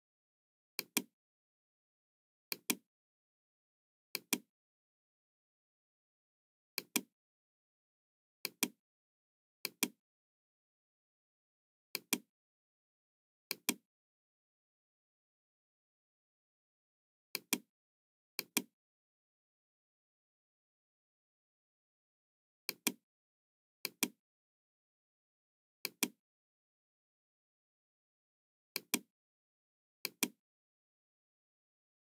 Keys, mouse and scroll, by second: 0.7 click, 2.5 click, 4.0 click, 6.7 click, 8.3 click, 9.6 click, 11.8 click, 13.5 click, 17.3 click, 18.3 click, 22.6 click, 23.8 click, 25.7 click, 28.6 Return, 28.6 KP_5, 28.6 KP_1, 28.6 click, 29.9 click, 30.9 KP_2, 31.4 KP_5, 31.5 Return.